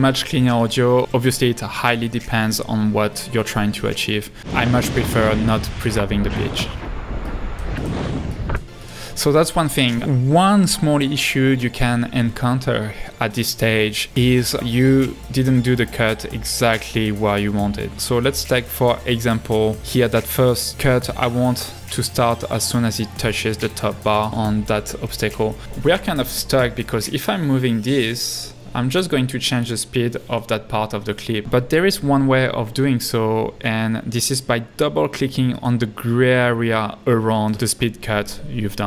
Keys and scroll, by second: 4.4 space, 24.7 super+=, 24.9 super+=, 25.1 super+=, 31.0 super+z.